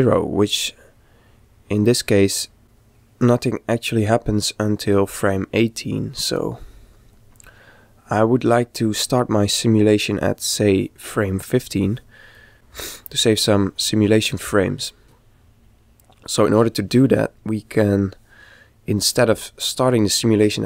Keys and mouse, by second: 6.7 middle click, 7.2 click, 12.5 middle click, 15.0-17.1 middle drag.